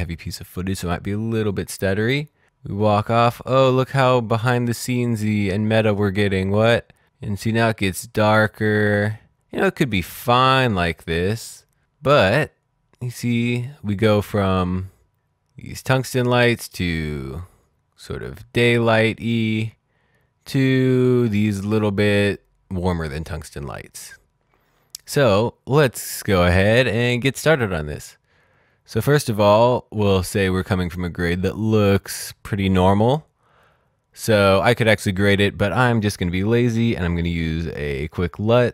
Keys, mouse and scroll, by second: 35.6 right click.